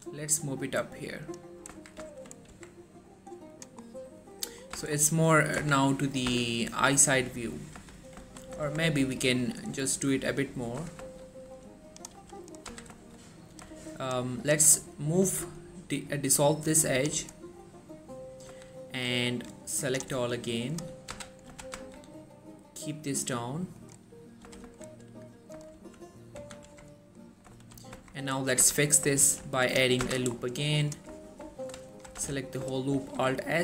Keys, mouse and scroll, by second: 1.2 click, 1.9-2.2 typing, 2.6 Tab, 2.9-3.2 scroll down 1, 3.6 click, 4.0-4.5 scroll up 1, 4.5 click, 4.9 z, 5.0-5.7 scroll up 1, 5.7 z, 6.4 z, 7.9 scroll down 1, 8.4 3, 8.8 Tab, 10.9 z, 11.2 shift+middle click, 11.7-12.3 click, 12.2 g, 12.6 right click, 12.8 z, 13.1 shift+middle click, 13.6 click, 14.0 alt+shift+click, 15.4 x, 17.0 click, 18.6 z, 19.4-20.3 click, 21.2 z, 21.6 g, 21.9 z, 24.0 click, 24.5 typing, 25.6 right click, 25.9-26.5 typing, 26.8 Tab, 27.0 scroll down 1, 27.3 middle click, 27.7 3, 28.1 Tab, 28.3-28.7 scroll up 1, 28.7 a, 29.4 ctrl+r, 29.8 click, 29.9 right click, 30.1 z, 30.3-30.8 scroll up 1, 30.8 click, 32.4 z, 32.6 scroll up 1, 33.1 alt+s.